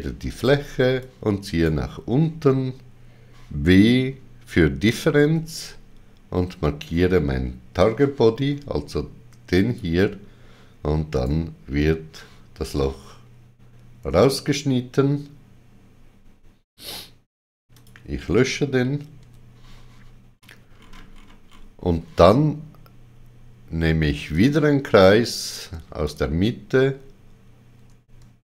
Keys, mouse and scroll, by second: 5.1 w, 9.5 click, 9.5 w, 11.1 right click, 17.7 click, 17.7 right click, 19.2 x, 20.3 scroll up 3, 24.3 click, 24.3-24.8 scroll up 1, 26.0 click.